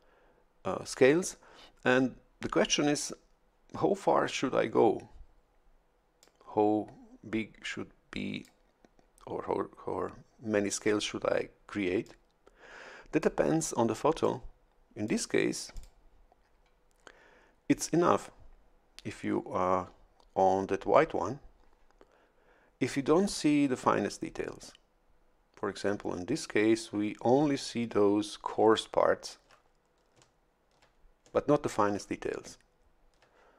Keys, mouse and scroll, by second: 6.2-8.6 drag, 12.0-13.4 drag, 14.2-15.2 drag, 15.7 click.